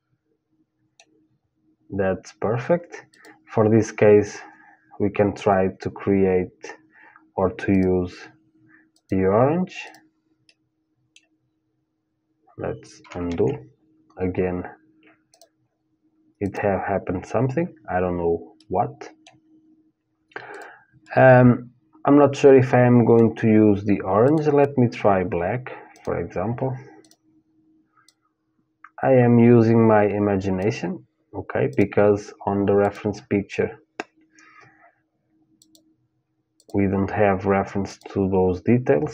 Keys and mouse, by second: 0.7 middle click, 2.7-4.7 drag, 8.7 click, 9.4-11.5 drag, 10.6-12.1 middle drag, 12.9 ctrl+z, 14.9-18.0 drag, 18.2-20.2 middle drag, 20.1-22.1 drag, 22.1 middle click, 23.9-28.6 drag, 31.3-34.4 drag, 35.3-39.1 drag.